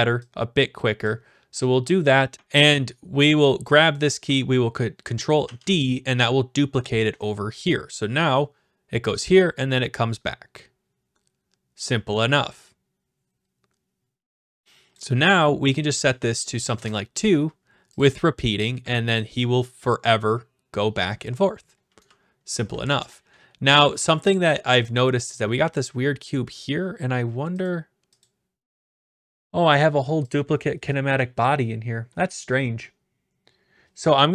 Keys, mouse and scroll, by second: 1.0 click, 3.7 click, 5.4 ctrl+d, 14.9 click, 15.8 click, 16.7 2, 18.0-19.1 drag, 19.2-20.2 drag, 21.8-23.4 typing, 24.0 right click, 26.1-27.2 scroll down 4, 27.6 click, 28.2 click, 29.1 click, 29.5-30.1 scroll, 30.3 click.